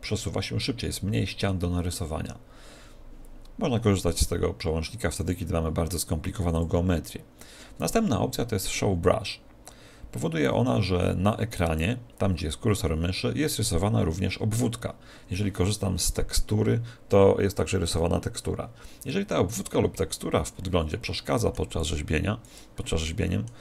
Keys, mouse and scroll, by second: 6.5 click, 20.6-22.5 middle drag, 21.7-23.6 drag, 23.2-23.6 middle drag.